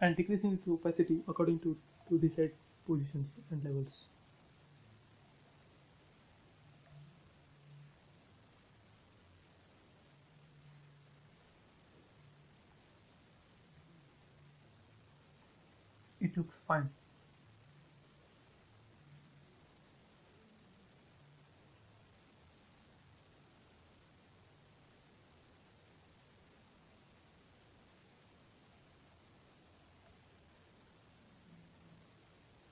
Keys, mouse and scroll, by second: 3.5-10.6 drag, 10.6 space, 10.9 click, 11.8 m, 12.0 click, 13.1 Right, 14.3 1, 14.5 Return, 15.2 space, 15.6 click, 16.3-16.8 scroll up 1, 17.3-17.9 scroll up 1, 17.9-23.9 middle drag, 23.9-28.1 drag, 28.1 space, 28.4 click, 28.7-29.2 scroll down 1, 29.3 middle click, 29.9 scroll down 1, 31.4 middle click, 32.5 click.